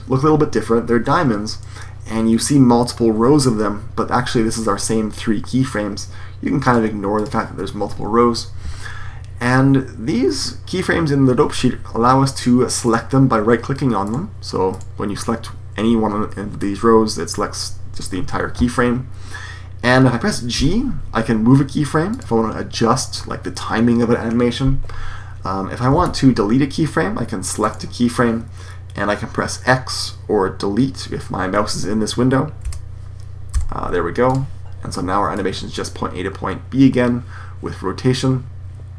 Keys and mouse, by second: 20.4 g, 25.8 super+z, 34.2 Delete, 34.2 BackSpace, 35.3 click, 36.2-37.2 drag.